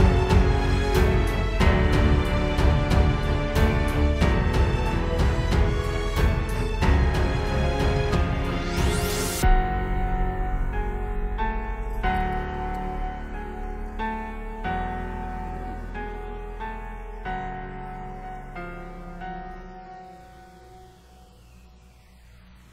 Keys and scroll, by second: 4.3 super+], 5.8 super+[, 13.5 space, 18.4 space, 19.3 super+space.